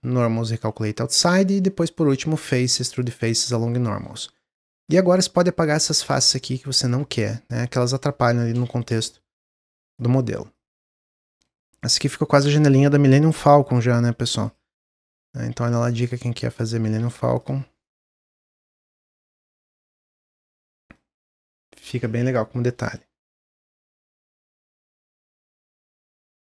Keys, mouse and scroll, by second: 3.8 middle click, 4.0-4.5 scroll up 1, 4.5 click, 5.0 middle click, 5.6 shift+click, 6.1 middle click, 6.7-8.6 shift+drag, 8.6 middle click, 9.1 shift+click, 9.9 shift+click, 11.1 middle click, 11.9 shift+click, 12.8 middle click, 13.3 x, 14.8 Tab, 15.3 Tab, 15.7 middle click, 16.2 Tab, 16.7 Tab, 17.0-17.3 scroll down 3, 17.3-19.2 drag, 19.2-22.0 middle drag, 22.0-22.7 scroll down 1, 22.7 middle click, 22.9 scroll down 1, 23.0 Tab, 24.9-26.4 shift+middle drag.